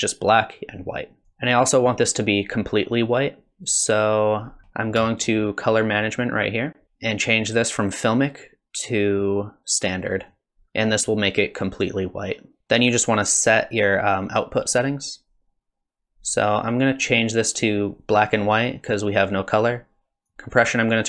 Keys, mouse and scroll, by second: 1.2 click, 3.6 click, 4.6-5.0 scroll down 18, 6.9 click, 6.9 scroll down 1, 7.9 click, 10.3 click, 13.7 click, 18.3 click, 20.3 click.